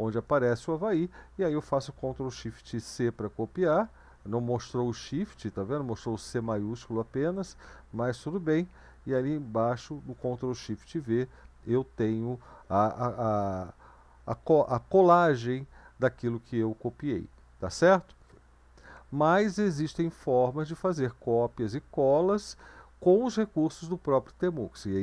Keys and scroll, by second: 2.8 ctrl+c, 8.5 ctrl+v.